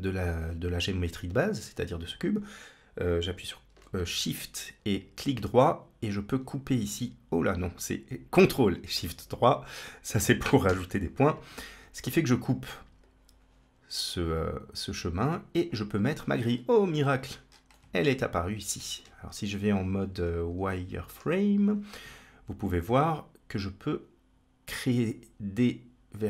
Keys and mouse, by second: 9.4 click, 10.0 click, 10.5 x, 12.8-15.5 drag, 16.8-17.1 shift+middle drag, 17.6-18.6 middle drag, 18.9 Tab, 20.4 z, 22.4-24.8 drag, 25.4-26.2 drag.